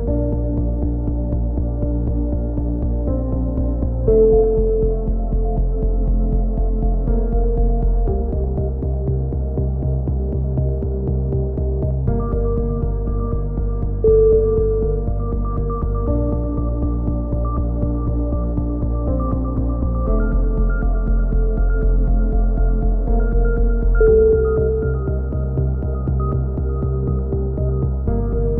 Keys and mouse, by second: 0.0-0.8 typing, 0.3 click, 1.2 click, 4.1-6.6 typing, 5.9-6.4 drag, 6.5 right click, 7.7 a, 8.2-8.8 drag, 9.1 KP_3, 10.1 a, 11.3 z, 12.8-13.3 drag, 12.8 right click, 13.3 KP_3, 13.6 z, 13.8 click, 15.2-17.8 drag, 15.2 right click, 16.8-17.7 right drag, 17.8 middle click, 17.9 a, 18.1 z, 18.3 z, 23.9 middle click, 24.4 z, 24.6-25.4 middle drag, 24.6 z, 25.4 click, 25.4 z, 26.2 KP_1, 27.8 z, 28.1 Tab.